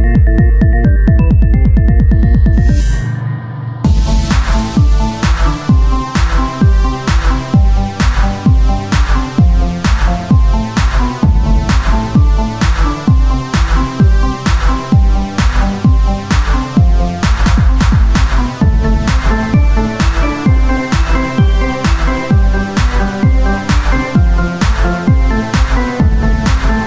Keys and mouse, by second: 1.4 o, 1.8 s, 6.0-7.7 drag, 7.7 Tab, 10.6-16.3 drag, 16.4 s, 19.2-20.4 drag, 20.4 ctrl+Tab, 22.0 ctrl+r, 23.6 Tab, 26.4 Tab.